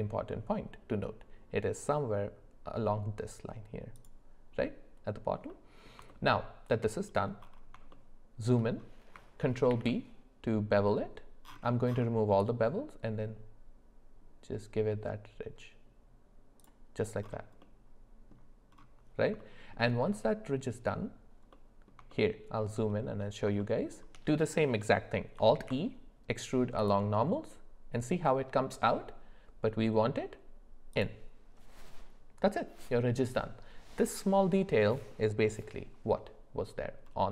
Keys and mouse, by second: 5.5 middle click, 6.1 alt+middle click, 7.9 shift+middle click, 9.7 ctrl+b, 17.6 middle click, 19.4 shift+middle click, 21.5 middle click, 22.1 shift+middle click, 23.6 shift+middle click, 25.5 alt+e.